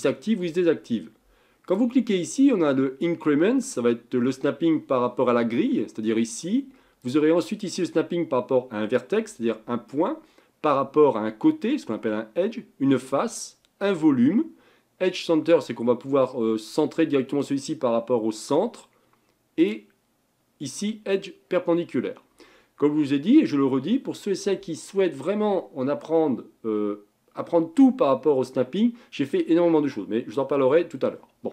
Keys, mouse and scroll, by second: 1.7-4.9 drag, 7.0-10.2 drag, 19.6-22.7 drag.